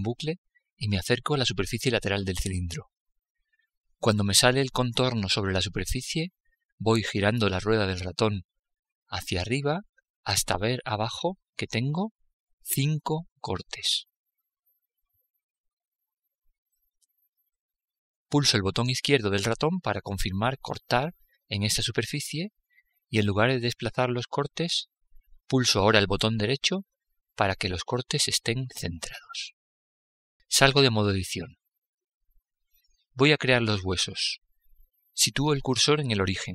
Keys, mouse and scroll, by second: 30.7 Tab, 36.4 shift+s.